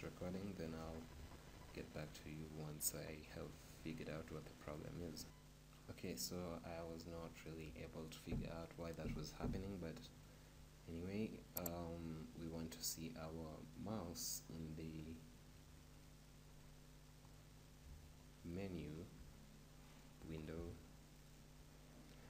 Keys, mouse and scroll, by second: 6.7-12.2 middle drag, 12.2-15.1 drag, 17.2-22.2 middle drag.